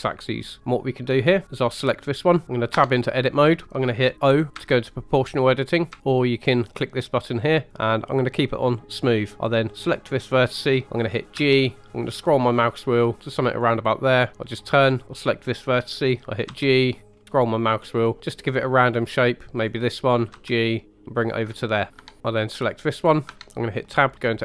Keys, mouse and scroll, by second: 0.6 ctrl+click, 0.6 middle click, 1.4 click, 2.7 Tab, 4.5 o, 5.9 o, 6.9 click, 7.7-9.2 drag, 9.8 click, 10.8 middle click, 11.3 g, 12.1-13.3 scroll down 1, 13.3 scroll down 1, 13.5 click, 14.3 middle click, 15.0 click, 16.4 g, 17.1 scroll down 3, 17.9 click, 18.2 middle click, 19.5 click, 20.3 g, 21.2 click, 21.9 middle click, 22.0 Tab, 22.2 Tab, 22.6 click, 23.3 Tab, 23.8 middle click.